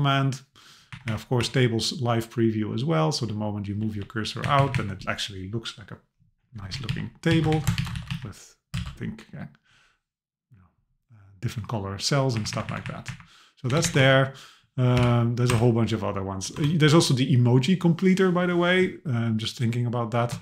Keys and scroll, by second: 0.9 Up, 3.3 Down, 4.4 Up, 6.7 Down, 7.5 super+Left, 7.8 shift+Down, 7.9 super+c, 8.8 super+v, 12.4 Up, 13.7 Return, 14.0 Up, 15.5 BackSpace.